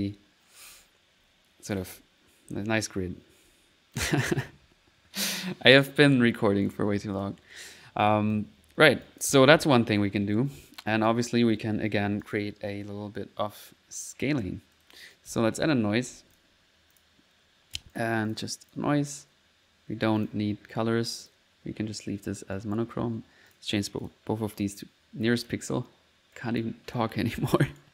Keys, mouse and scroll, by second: 0.0-4.6 typing, 6.7 click, 7.2 click, 8.1 click, 9.1 click, 9.4-10.8 typing, 9.5 click, 12.0 middle click, 12.3 click, 13.0 1, 14.0 1, 14.8 middle click, 15.1-16.3 typing, 17.0 click, 17.4 click, 18.0 click, 18.7 click, 19.2 click, 20.2 click, 21.3 click, 22.6 right click, 23.5 click, 24.1 click, 24.6 click, 25.4 click, 25.7 click, 27.7 right click.